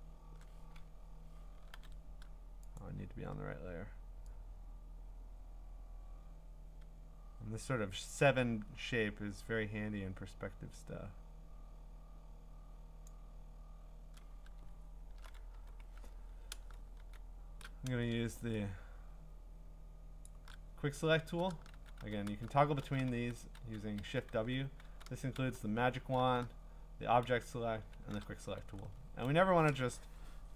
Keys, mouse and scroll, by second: 1.7 ctrl+d, 2.8 click, 13.1 click, 14.7 scroll, 15.5 w, 17.0 w, 20.2 shift+click, 21.7-27.2 typing, 28.6-29.4 scroll.